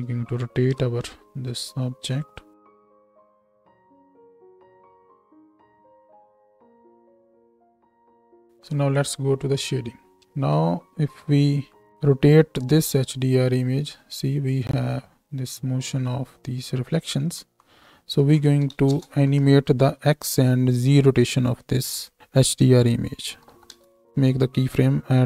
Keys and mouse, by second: 0.7 n, 1.7-5.8 middle drag, 2.6 r, 4.4 r, 6.1 g, 8.7-10.0 drag, 10.1 KP_0, 10.1 space, 10.3 space, 12.8-25.2 drag, 24.1 ctrl+z.